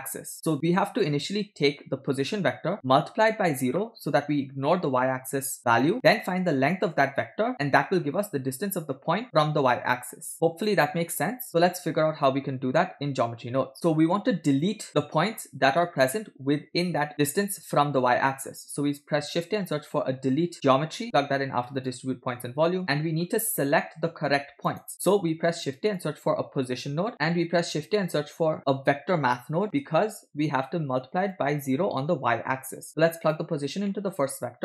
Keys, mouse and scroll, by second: 2.8 click, 10.3-11.4 ctrl+drag, 13.6 w, 13.8 shift+middle click, 13.8-14.1 scroll down 1, 18.7 shift+a, 20.5 e, 22.4 click, 23.0 middle click, 23.3 scroll up 1, 24.1-24.7 drag, 24.9 middle click, 25.2 shift+a, 27.2 shift+a, 32.8 click, 33.9 middle click, 34.2-34.6 scroll up 2.